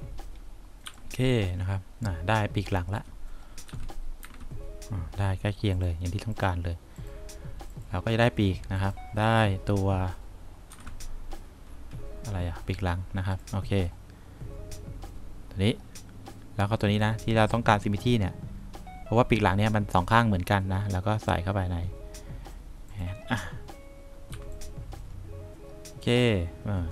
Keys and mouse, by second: 1.0 3, 3.8 F3, 4.4 F4, 10.9 F1, 24.4 3.